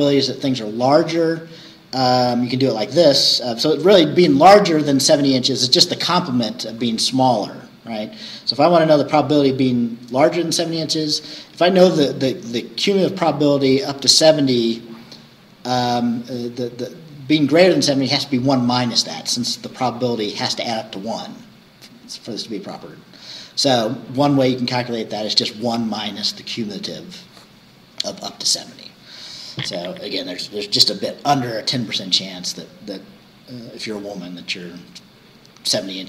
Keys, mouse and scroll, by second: 2.1-2.5 scroll down 2, 7.5-11.7 scroll up 2, 11.7-16.0 scroll up 1, 16.0-20.2 scroll up 1, 20.2-22.9 scroll up 1, 22.9-24.1 scroll down 6, 26.0-26.3 scroll down 2, 31.8-34.0 scroll up 4, 34.0-36.0 scroll up 1.